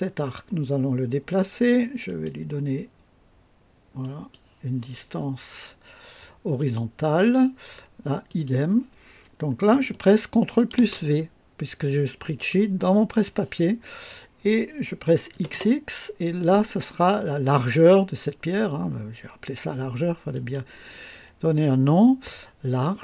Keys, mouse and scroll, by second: 2.0 click, 4.0 click, 6.6 click, 8.3 click, 10.8 ctrl+v, 15.3 typing, 20.3 click.